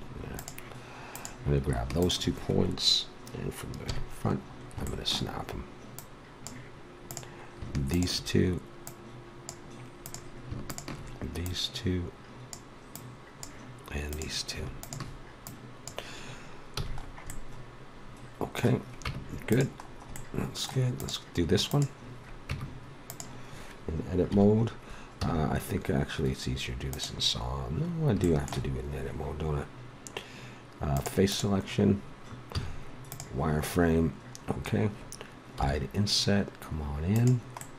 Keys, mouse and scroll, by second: 1.1-2.8 drag, 3.8 KP_1, 5.9-17.2 drag, 16.7 a, 17.2 middle click, 19.0 Tab, 20.9-22.2 drag, 22.4 Tab, 24.3 KP_1, 25.2 z, 32.5 click, 32.5 z, 35.6 i.